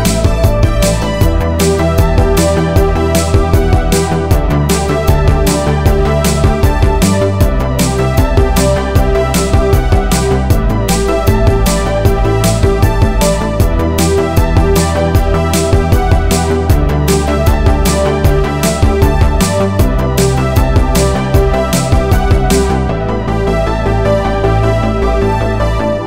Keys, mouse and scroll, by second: 0.0 click, 1.8 click, 2.7 click, 4.2 scroll up 2, 5.7-6.7 scroll up 1, 6.7 Tab, 7.6 click, 8.9 g, 9.2 z, 11.4 click, 12.2 click, 13.8 g, 14.1 z, 15.7 click, 16.6 click, 17.9 g, 18.2 z, 19.8 click, 20.3 click, 21.2 g, 21.7 z, 22.9 click, 23.4 click, 24.7 g, 24.8 z.